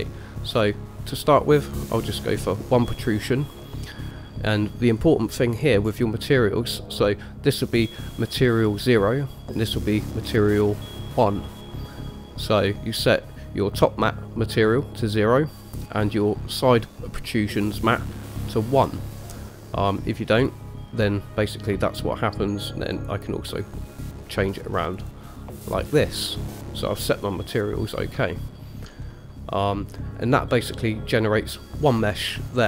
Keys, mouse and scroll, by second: 2.0 click, 3.3 middle drag, 5.7-7.1 scroll up 3, 7.1 click, 7.1 scroll up 1, 9.6 click, 20.6 click, 23.1 click, 25.1 click, 26.0 click, 28.5-29.0 shift+middle drag, 29.2 middle click.